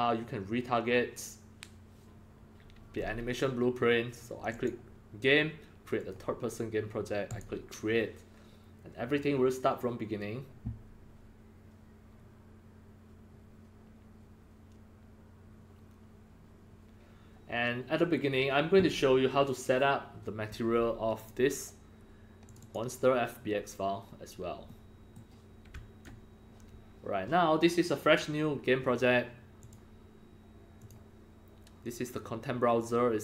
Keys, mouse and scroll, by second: 4.5 click, 5.9 click, 7.2 click, 21.1 click, 22.4 click, 22.6 click, 24.6-25.1 middle drag, 25.7-26.0 alt+drag, 29.6-33.2 drag.